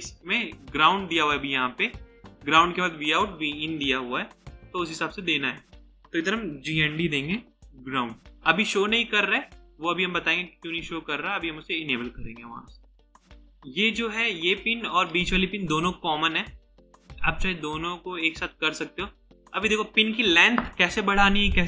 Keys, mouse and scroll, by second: 6.4-7.9 typing, 13.2 double click, 19.5 double click.